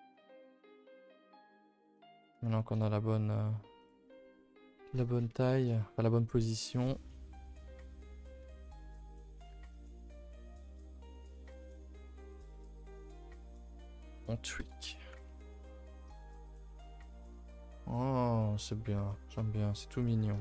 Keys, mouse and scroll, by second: 2.2 r, 4.0 a, 4.1 a, 4.9 l, 5.6 s, 8.4 r, 9.5 g, 10.4 middle click, 10.8-12.2 scroll up 11, 11.1 shift+middle click, 11.6 middle click, 12.2 middle click, 12.6 r, 13.1 g, 14.6-15.9 typing, 15.3 ctrl+s, 15.5 Tab, 16.3 shift+middle drag, 16.5-17.0 scroll down 4, 16.7 ctrl+s, 17.1-17.8 shift+middle drag, 17.8-18.3 scroll up 1, 18.3 shift+middle click, 18.7-19.4 scroll up 4, 19.1 shift+middle drag.